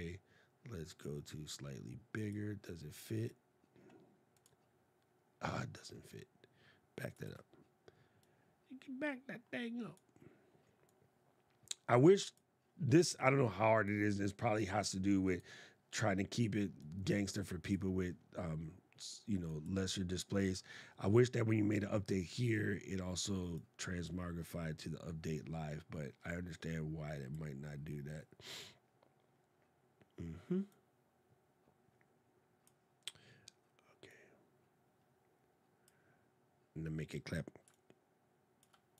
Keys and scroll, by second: 6.9 super+z.